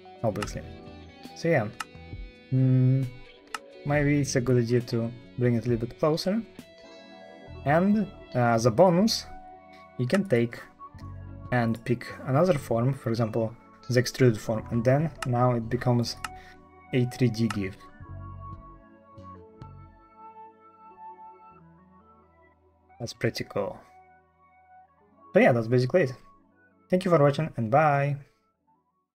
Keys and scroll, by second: 0.3 space, 1.7-5.6 typing, 6.3 alt+d, 14.5 Escape, 15.1 Escape, 16.1 space, 17.3 space, 17.8 f, 18.1 d, 18.7 d.